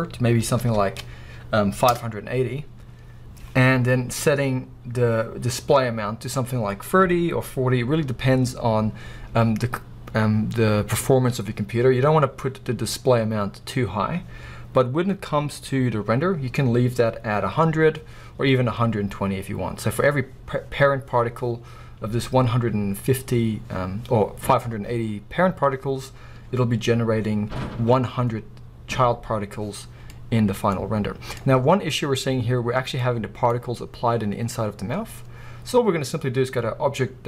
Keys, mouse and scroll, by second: 1.9 Return, 1.9-30.1 drag, 30.0 scroll down 1, 30.1-37.2 middle drag, 30.8-31.4 scroll up 2, 32.1-33.0 scroll up 2, 33.5-34.3 scroll up 2, 34.3-37.2 scroll down 2.